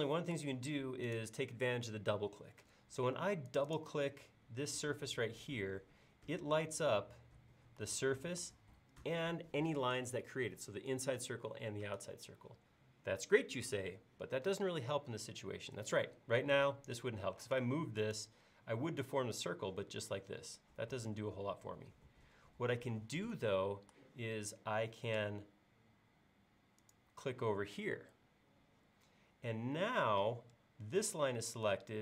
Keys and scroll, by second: 17.5 m, 22.3 Escape, 23.0 space.